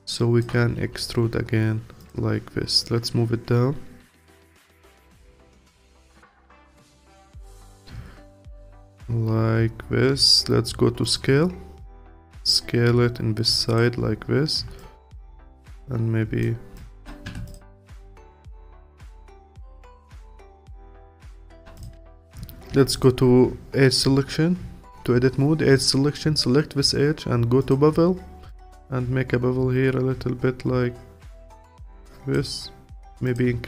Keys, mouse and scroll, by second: 0.8 e, 2.8 click, 5.1 click, 6.2-9.3 alt+drag, 11.0-12.6 drag, 14.8-15.8 alt+drag, 16.8 alt+click, 17.3 Tab, 17.5 click, 17.7-18.1 scroll down 1, 18.1-20.2 alt+drag, 20.2-20.9 scroll up 3, 20.9-21.3 scroll up 2, 21.3 alt+click, 22.0 Tab, 22.7 2, 22.9 click, 27.6 click, 33.2-33.6 drag.